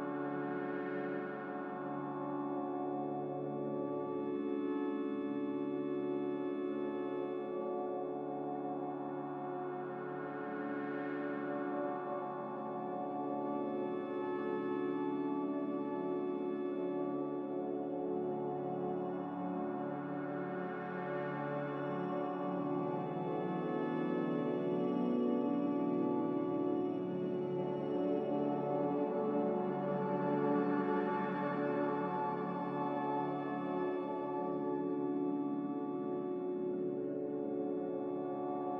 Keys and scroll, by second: 1.5 b, 4.8 n, 5.3 ctrl+b, 7.5 z, 8.6 5, 9.0 Return, 33.4 ctrl+x, 36.6 ctrl+z, 37.1 ctrl+z.